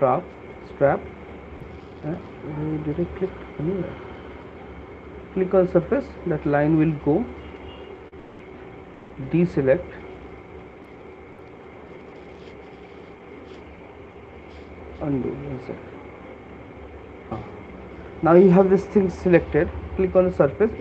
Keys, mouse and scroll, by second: 0.8 alt+click, 2.3 right click, 4.3 click, 5.0 alt+click, 5.8 click, 8.1 shift+click, 9.3 ctrl+click, 10.6 alt+click, 10.8 right click, 13.3 ctrl+click, 15.5 ctrl+z, 15.8 ctrl+z, 16.8 ctrl+z, 20.3 click.